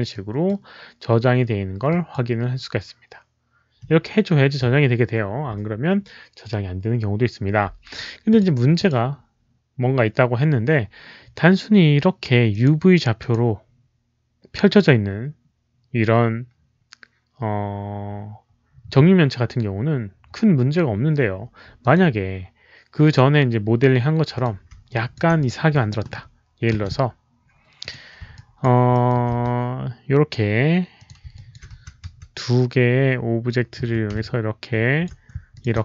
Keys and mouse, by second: 0.0 click, 0.4 w, 1.8 click, 1.8 w, 3.4 click, 3.4 w, 4.5 click, 6.7 click, 8.2 click, 8.7 click, 12.4 click, 13.1 click, 21.7 click, 22.9 click, 24.2 click, 24.8 alt+click, 25.3 click, 25.6 click, 26.6 Delete, 27.7 alt+click, 28.3 alt+click, 28.8 alt+middle click, 29.2 w, 30.9 click, 31.0 Delete, 31.0 alt+middle click, 31.0 w, 31.3 alt+click, 31.7 r, 32.0 4, 32.3-33.7 alt+middle drag, 33.7 5, 34.1 alt+click, 35.4 shift+click, 35.5-35.8 typing, 35.7 middle click.